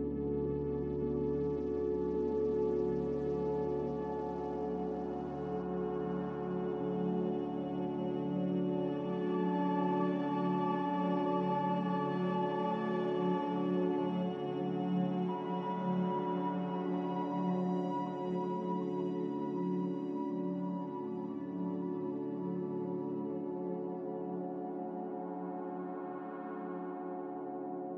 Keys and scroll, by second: 17.7 z, 22.7 Delete, 23.6 a, 25.5 z.